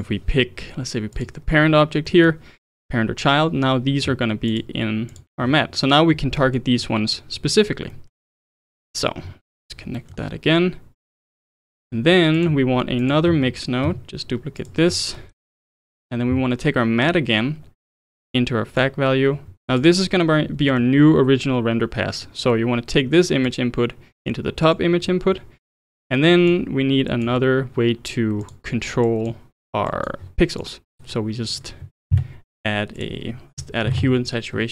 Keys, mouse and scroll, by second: 2.1-4.5 middle drag, 4.5 ctrl+shift+click, 5.1 ctrl+shift+click, 6.4 middle click, 6.7 scroll down 3, 7.9-8.6 middle drag, 8.6 click, 9.4-10.0 ctrl+right drag, 10.0-11.6 middle drag, 11.6 click, 12.1 scroll up 1, 12.4 click, 13.0 click, 13.8 shift+d, 14.9 scroll up 3, 15.2-15.5 middle drag, 15.5 click, 17.1 click, 19.8 click, 20.6-23.5 middle drag, 23.5 click, 24.7 click, 25.3 scroll down 2, 25.6-26.3 middle drag, 26.3 click, 27.1 click, 28.4 click, 29.0 click, 29.9 click, 30.6 click, 31.5 click, 32.1 shift+a.